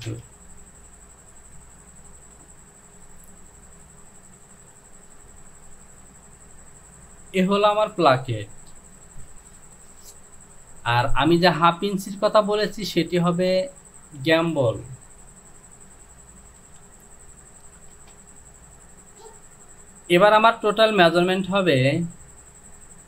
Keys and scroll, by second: 0.1 Return, 2.2 Delete, 18.0 Return.